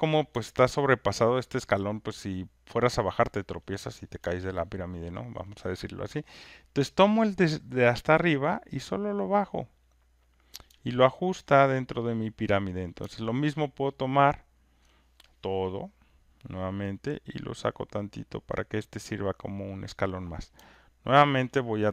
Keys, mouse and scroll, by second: 1.0 alt+click, 5.4 click, 6.9 click, 10.3 click, 12.7 alt+click, 14.8 alt+click, 16.2 click, 19.9 click, 21.3 alt+click.